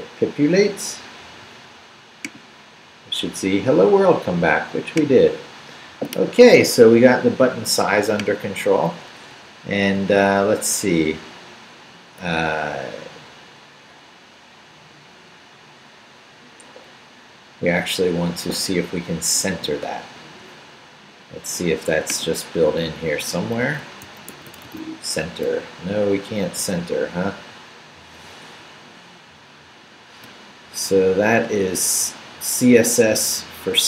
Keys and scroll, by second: 9.3 Up, 9.9 Right, 13.2 Right, 18.7 Right, 20.3 Left, 23.6 super+f, 24.0 super+c, 24.3-25.2 typing.